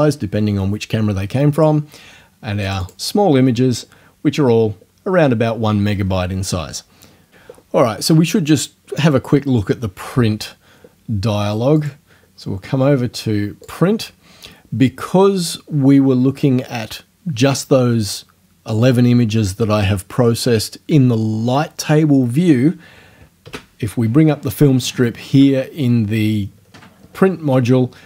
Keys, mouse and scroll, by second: 1.6 click, 2.6 click, 11.8 click, 13.7 click, 23.4 ctrl+f, 26.6-27.3 scroll down 4.